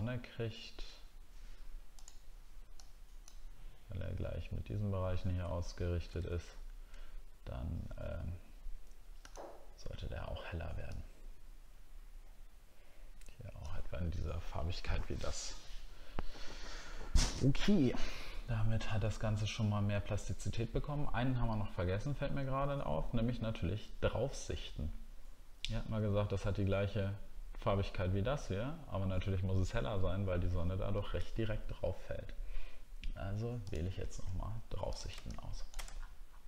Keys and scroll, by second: 6.1 alt+Tab, 36.0 alt+scroll up 5.